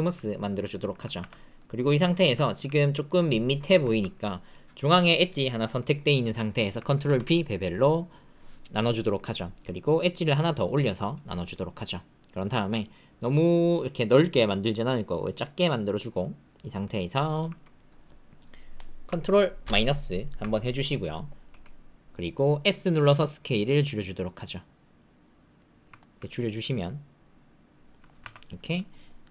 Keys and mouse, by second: 0.2 ctrl+middle click, 1.2 Tab, 1.5 middle click, 2.1 shift+middle click, 2.4 ctrl+middle click, 2.9 click, 3.6 shift+click, 3.8 ctrl+click, 7.0 ctrl+b, 16.8 shift+middle click, 17.2 ctrl+middle click, 17.6 middle click, 19.6 ctrl+KP_Subtract, 21.4 s, 25.9 ctrl+middle click, 26.2-28.0 middle drag, 28.2 Tab, 28.6 middle click.